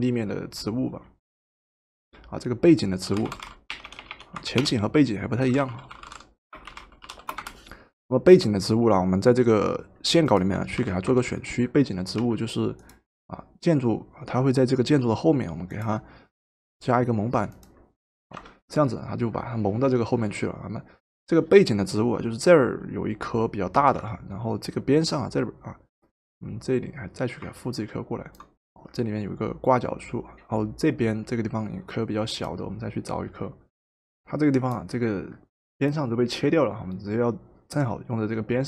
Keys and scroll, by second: 2.9-7.6 typing, 10.9-12.8 typing, 18.3 v, 23.8 v, 33.7 ctrl+t.